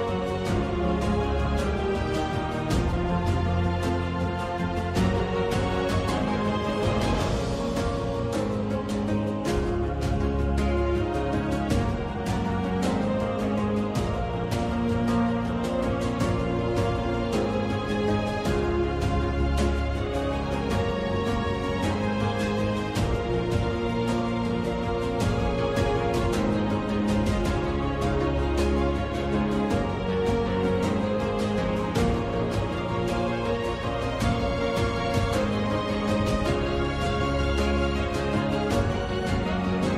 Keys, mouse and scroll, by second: 0.1 click, 1.7 click, 7.6 ctrl+click, 11.4 g, 14.3 ctrl+alt+d, 14.3 alt+click, 14.6 Tab, 18.5 ctrl+e, 18.9 click, 19.4 ctrl+e, 20.1 click, 20.4 ctrl+e, 20.7 click, 22.9 `, 23.8 `, 26.8 alt+middle click, 27.9 alt+click, 28.9 2, 30.0 3, 31.2 click, 32.6 click, 32.7 click, 34.5 click, 34.6 click, 35.7 click, 37.5 alt+e, 37.9 click, 38.6 alt+e, 39.1 click.